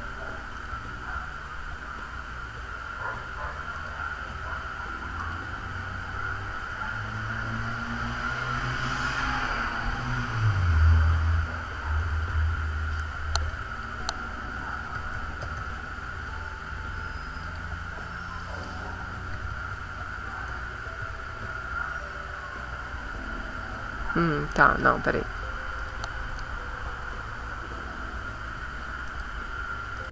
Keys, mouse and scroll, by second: 0.6 click, 3.8 click, 5.2 click, 12.0 click, 13.5 click, 14.7-15.9 typing, 17.4 click, 18.4 click, 19.1-21.4 typing, 25.8 click, 29.1 right click.